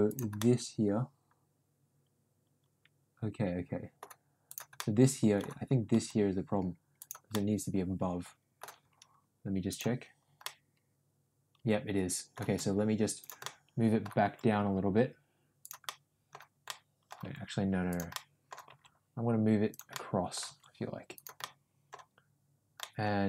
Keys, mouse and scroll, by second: 0.3-3.9 middle drag, 4.4 click, 4.7 middle click, 5.8 g, 7.3-8.6 middle drag, 9.6 click, 10.4-12.2 middle drag, 12.3 g, 13.4 middle click, 14.1 g, 15.8 middle click, 16.7 middle click, 17.1 g, 18.1 middle click, 18.6 g, 20.0 middle click, 20.4 g, 21.5 middle click, 22.7 middle click.